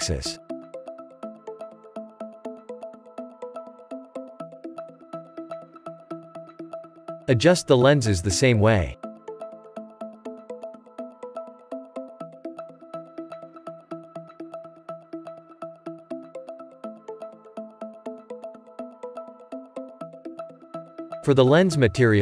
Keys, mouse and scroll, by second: 2.4-2.7 scroll down 3, 2.7-3.8 shift+middle drag, 3.8 Tab, 4.3 click, 4.6-5.7 shift+middle drag, 5.7 KP_Divide, 7.0 click, 7.5-8.9 shift+middle drag, 8.9 s, 14.0 click, 14.2 scroll down 2, 14.5 shift+middle click, 15.1 click, 15.3 scroll up 2, 17.9-20.5 drag, 20.5 s.